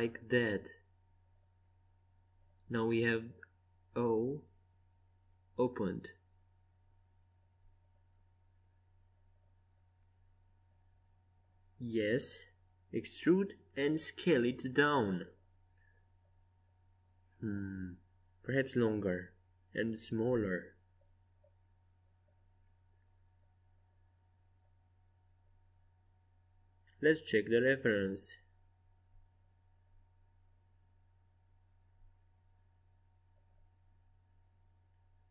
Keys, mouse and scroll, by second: 6.7 ctrl+z, 11.9 e, 13.8 s, 16.2-18.4 middle drag, 18.4-20.3 drag, 20.1 s, 21.2-22.6 middle drag, 25.1 KP_5, 25.6 KP_1, 27.7 KP_5, 29.7 KP_3, 32.5-34.2 middle drag, 33.7 z, 34.5 a.